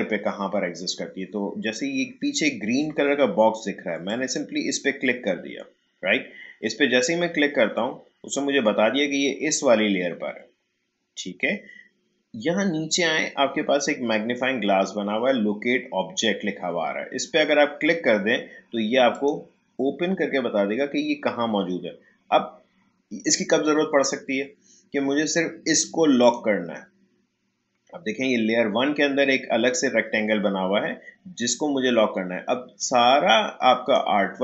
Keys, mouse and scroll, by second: 4.0 click, 19.1 click, 26.2 click, 32.8-34.4 drag.